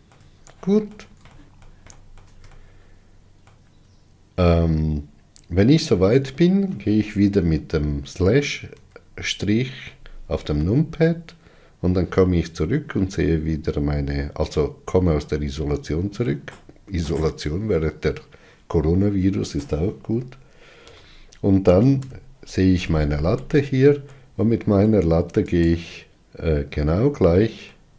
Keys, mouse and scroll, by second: 0.8-9.0 shift+middle drag, 9.0 KP_Divide, 14.1 scroll down 2, 14.8 scroll up 2, 15.5-21.1 middle drag, 21.1 KP_1, 22.2 KP_3, 24.4-25.8 middle drag, 25.8 click.